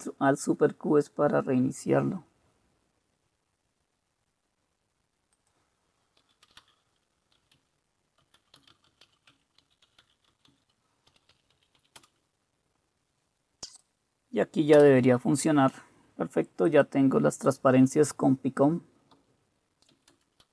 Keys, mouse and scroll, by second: 6.2-12.3 typing, 6.4 click, 14.8 super+Return, 14.8-19.1 drag, 18.9-20.5 typing, 20.1 Return.